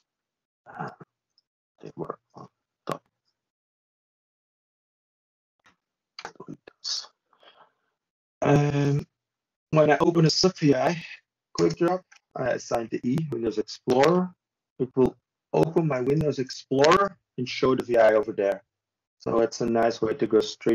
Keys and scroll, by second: 0.2 ctrl+z, 2.1 ctrl+space, 2.8 ctrl+w, 9.1 ctrl+z, 11.2 ctrl+space, 13.0 ctrl+shift+w.